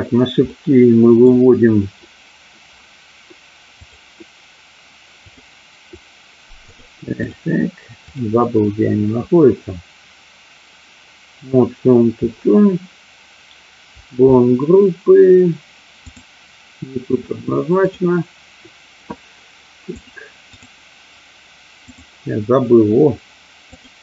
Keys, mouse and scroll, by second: 0.4 middle click, 6.7 click, 8.1 click, 16.0 click, 17.0 click, 17.8 click, 21.8 click.